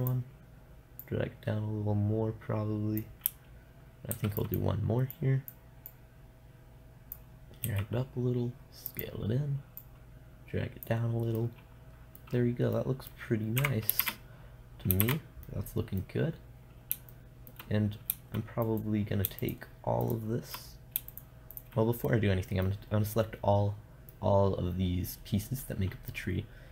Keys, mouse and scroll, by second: 0.5-3.4 drag, 4.6 shift+d, 5.0-6.2 drag, 8.2 s, 9.5-11.8 drag, 11.8 middle click, 14.0 KP_0, 14.5 shift+z, 15.5 shift+z, 19.1-22.5 right drag, 22.5-23.8 middle drag, 24.1-26.7 middle drag.